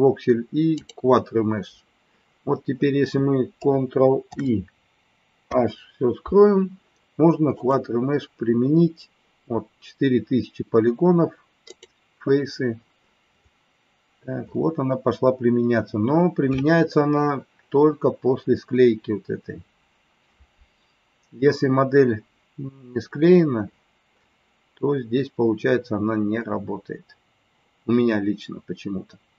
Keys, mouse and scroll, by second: 0.8 click, 7.6-29.3 drag.